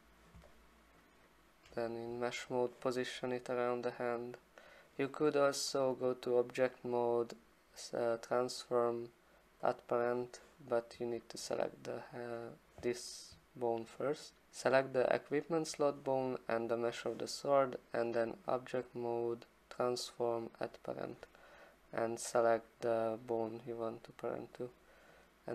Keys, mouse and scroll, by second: 1.0 alt+click, 1.2 alt+click, 1.4 alt+click, 2.6 click, 3.5 click, 6.1 click, 9.7 click, 11.3 click, 12.5 click, 18.2 click, 20.6 click, 23.5 click.